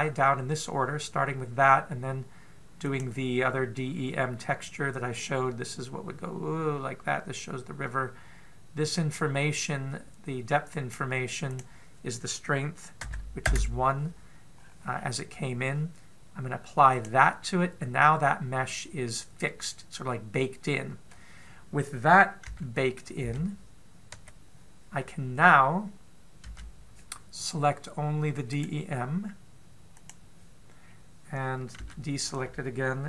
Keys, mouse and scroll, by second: 3.6 click, 6.0 click, 12.3 click, 15.4 scroll up 1, 15.7-16.8 scroll down 1, 16.8-17.7 scroll down 3, 17.7 click, 18.8 middle click, 23.3 a, 24.1 a, 24.9 KP_7, 27.3 a, 29.3 right click, 31.6-32.5 scroll down 1, 32.5 scroll down 1, 32.6 a.